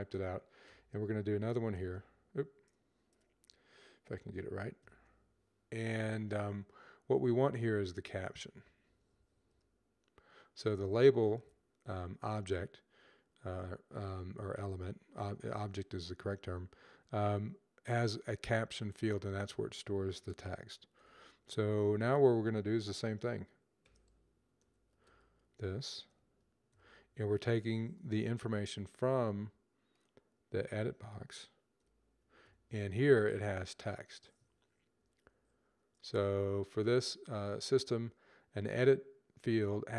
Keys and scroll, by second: 0.3 typing, 4.3-5.0 typing, 7.1-8.2 typing, 20.6 typing, 23.5-26.5 typing, 31.3-33.1 typing, 34.6 Down, 34.9 typing.